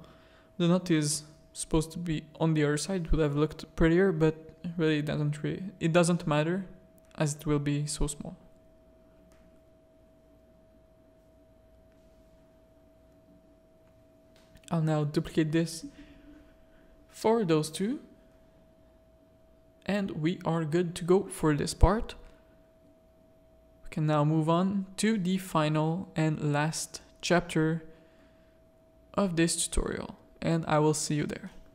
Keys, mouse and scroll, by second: 0.1 click, 1.7-3.4 drag, 3.8 z, 5.5 middle click, 11.5 shift+middle click, 12.3 z, 13.0 alt+d, 14.3-16.5 drag, 17.1 shift+click, 17.9 z, 18.3 alt+a, 18.7 middle click, 19.4 z, 19.8 middle click, 21.5-23.0 middle drag, 23.8 middle click, 24.5 middle click, 25.0-26.2 shift+middle drag, 27.5 middle click, 28.5 middle click, 29.5 middle click, 30.9 middle click.